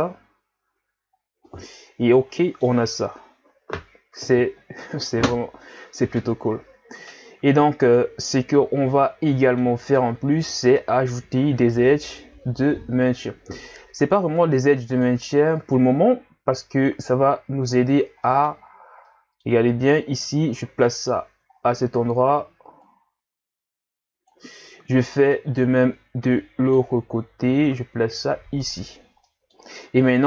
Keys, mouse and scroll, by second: 0.8 a, 1.1 scroll down 1, 1.4-4.6 middle drag, 8.0-8.6 middle drag, 8.6-9.0 scroll up 4, 9.3-10.3 middle drag, 10.3 Tab, 10.8-12.5 middle drag, 12.5 ctrl+r, 18.2 middle click, 18.5-19.1 scroll up 4, 19.1 middle click, 19.7-21.0 scroll down 1, 21.0-21.5 scroll down 1, 21.5-22.3 scroll up 3, 22.3-22.8 scroll up 1, 22.8-25.1 drag, 25.1 scroll down 1, 25.3 middle click, 26.2 ctrl+r, 29.0 scroll down 1, 29.2 middle click, 29.8 scroll up 2.